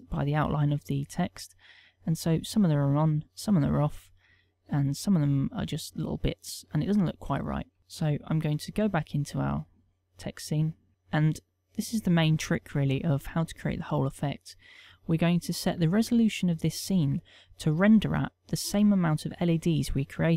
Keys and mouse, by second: 9.9 click.